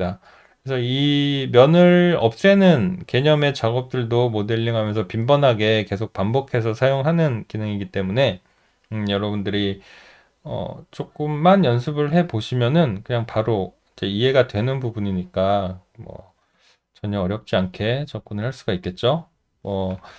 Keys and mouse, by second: 18.1 alt+right click, 18.5 alt+middle click, 19.1 alt+middle click.